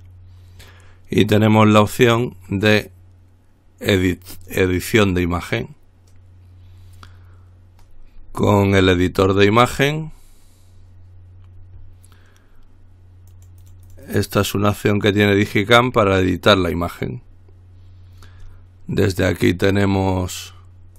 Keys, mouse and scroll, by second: 4.5 click, 8.4-9.0 scroll up 1, 9.0 click, 9.8-10.2 scroll up 1, 10.2-10.9 scroll down 1, 13.6-14.9 drag, 15.1 click.